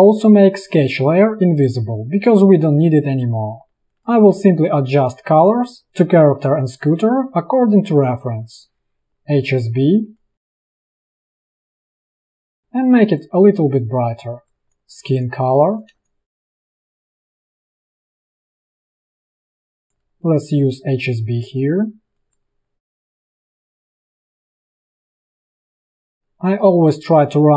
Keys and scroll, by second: 3.7 space, 14.7 space, 14.7 i, 15.6 v, 16.0 space, 16.2 ctrl+], 19.3 ctrl+shift+], 20.0 v, 22.7 space, 24.5 space, 25.3 i, 25.9 v, 26.2 a.